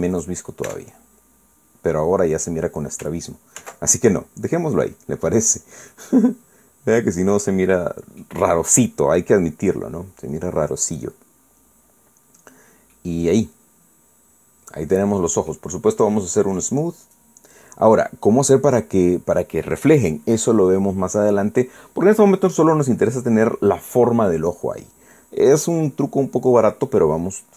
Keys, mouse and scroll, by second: 1.1 click, 1.7 Tab, 2.0 scroll down 1, 3.0 scroll up 1, 4.6 ctrl+z, 5.4 scroll down 2, 6.3 scroll down 2, 6.9 middle click, 7.9-8.6 scroll down 2, 10.1-10.5 scroll up 2, 11.3 scroll down 2, 12.7-13.3 scroll up 4, 13.5-13.9 scroll down 2, 13.9-16.7 drag, 18.0 click, 19.0 scroll down 2, 19.8 scroll up 2, 20.2 scroll down 2, 22.3 scroll down 2, 23.0-23.7 scroll up 4.